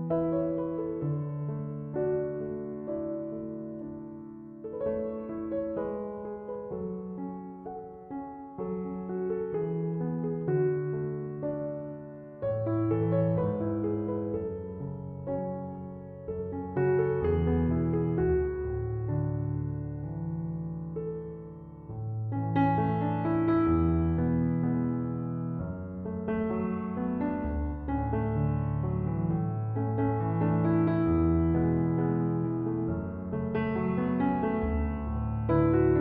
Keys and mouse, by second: 3.6 click, 8.3 click, 28.0 click, 30.6 click, 33.1 click.